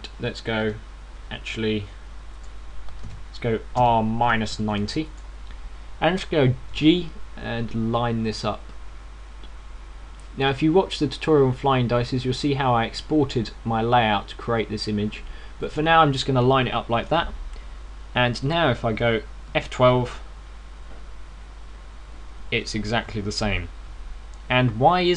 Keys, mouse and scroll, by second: 3.8 ctrl+z, 3.8 click, 4.5 r, 7.5 click, 7.5 g, 16.7 click.